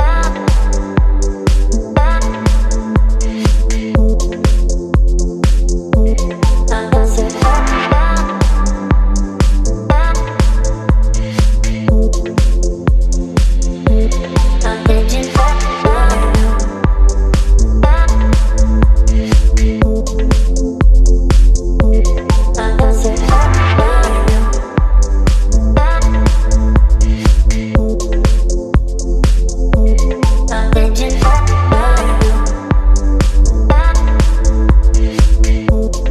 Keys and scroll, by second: 5.2 v, 9.0 ctrl+t, 12.8 Return.